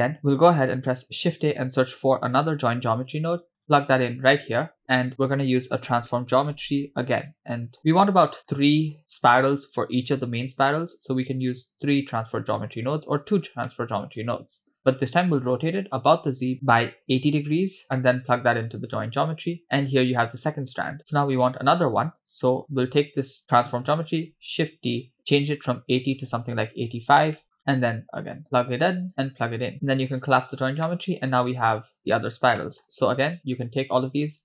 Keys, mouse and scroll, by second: 0.7 shift+a, 5.1 shift+a, 7.7 BackSpace, 11.5 click, 12.9 drag, 13.4 scroll up 2, 13.6 middle click, 15.5-17.5 drag, 17.5 BackSpace, 17.8-18.6 scroll down 2, 18.7-19.5 drag, 20.1-21.5 middle drag, 22.3 click, 23.0 click, 24.2 shift+d, 25.3 click, 26.0-27.4 drag, 28.2-28.9 drag, 29.1-29.7 drag, 30.1 click, 30.9-32.2 middle drag, 32.6 middle click, 33.3-34.2 drag.